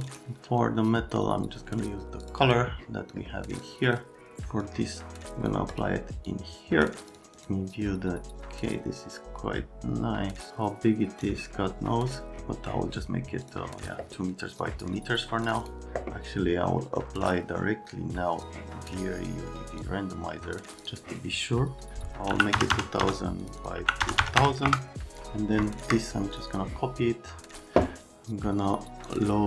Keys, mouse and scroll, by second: 2.5 click, 3.6 click, 4.6 click, 5.7 click, 6.3 click, 7.0 click, 7.2 click, 8.4 click, 13.5 click, 14.6 click, 15.5 click, 15.7 click, 18.4 click, 19.8 click, 20.8 click, 20.9 click, 22.3-24.4 typing, 23.4 click, 23.6 click, 24.7 KP_Enter, 25.2 click, 25.6 shift+click, 26.3 click, 26.5 click, 29.0 click.